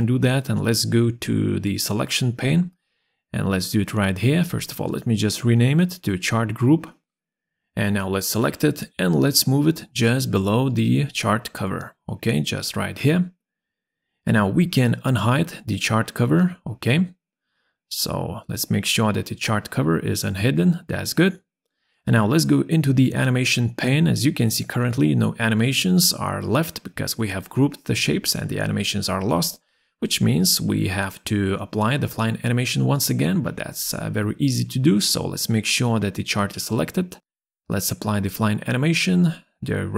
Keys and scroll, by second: 5.2-7.7 typing, 8.1 Return.